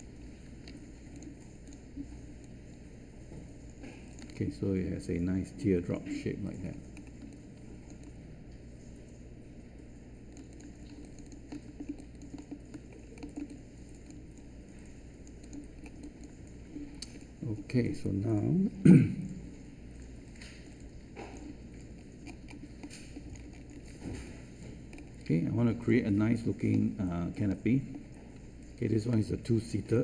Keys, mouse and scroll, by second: 7.2 space.